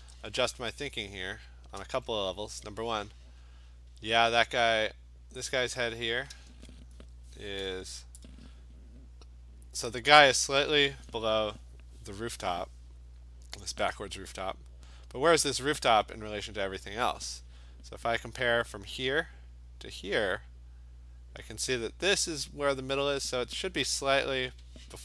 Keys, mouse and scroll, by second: 0.2-1.5 click, 0.7 click, 0.8 click, 0.8 click, 1.6-4.1 scroll, 1.7 click, 5.2 click, 5.6 click.